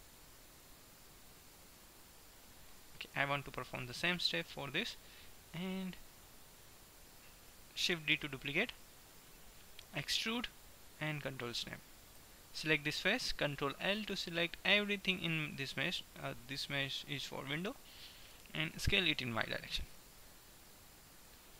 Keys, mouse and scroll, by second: 2.2 middle click, 3.7-5.3 middle drag, 8.3 shift+d, 10.3 e, 12.2-14.0 drag, 14.0 ctrl+l, 16.2 g, 18.8 s.